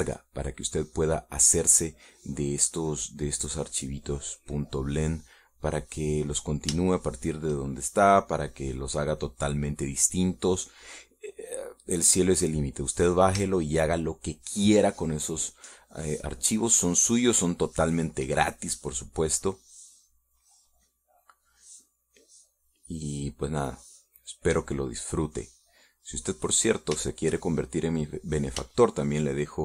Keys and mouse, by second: 0.4 shift+middle click, 3.9-5.1 drag, 5.3-6.7 drag, 7.2 click, 8.3 shift+middle click, 9.7-13.3 drag, 14.9 shift+middle click, 15.5 shift+middle click, 19.2 shift+middle click, 19.9 shift+middle click, 20.7-23.2 drag, 23.3 middle click, 24.9-28.1 drag, 28.5-29.6 shift+middle drag.